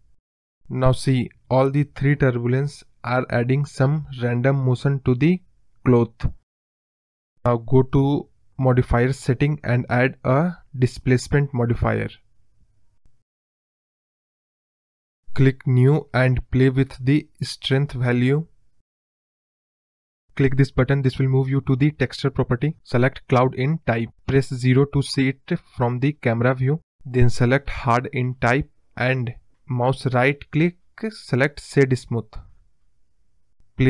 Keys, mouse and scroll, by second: 0.3 scroll down 2, 0.4 middle click, 0.9 click, 1.3-2.3 drag, 2.9 scroll down 1, 2.9-3.6 middle drag, 3.6 KP_0, 4.0-4.6 scroll up 4, 4.6 click, 7.7 click, 8.2 click, 9.6 click, 12.8 space, 12.9 scroll down 2, 13.1 middle drag, 13.2 scroll up 1, 13.3 scroll down 3, 13.4-13.9 middle drag, 13.9-14.9 scroll down 3, 14.9-16.0 drag, 16.7-17.7 drag, 17.8-18.7 scroll up 3, 18.0-18.3 middle drag, 18.7 click, 18.8 click, 19.8 scroll down 1, 19.9-20.9 middle drag, 20.9-23.9 drag, 23.9 scroll up 3, 24.1-25.2 middle drag, 25.2 KP_0, 25.6-26.4 scroll up 4, 26.8-28.0 drag, 28.0-28.4 scroll up 2, 28.4 scroll down 1, 30.9-33.0 right drag.